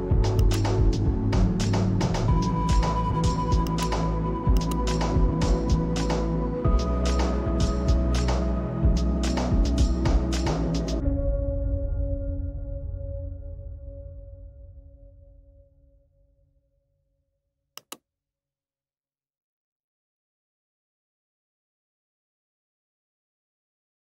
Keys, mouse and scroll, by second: 3.7 click, 6.8 click, 7.5-10.9 shift+drag, 16.6 z, 18.3-21.7 drag.